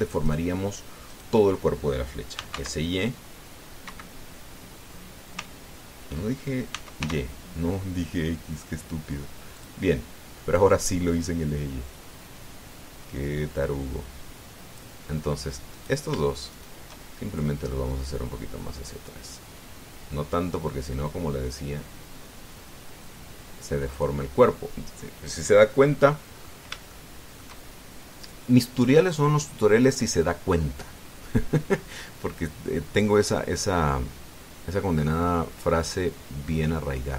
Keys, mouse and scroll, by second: 0.2 shift+right click, 1.0 shift+right click, 1.9 shift+right click, 3.2 s, 3.3 x, 4.6 Escape, 7.5 s, 7.8 y, 10.3 click, 11.3-15.7 drag, 16.5 right click, 17.3 shift+right click, 18.1-24.9 shift+drag, 27.2-27.5 scroll up 1, 27.7 shift+middle click, 28.5-28.9 shift+scroll up 1, 32.8-37.1 drag.